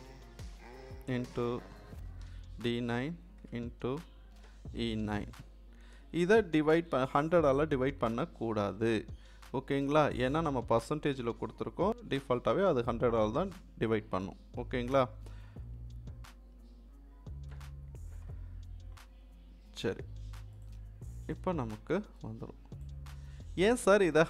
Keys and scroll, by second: 1.1 shift+8, 2.2 d, 2.7 9, 3.4 shift+8, 4.4 e, 5.1 9, 17.5 Return.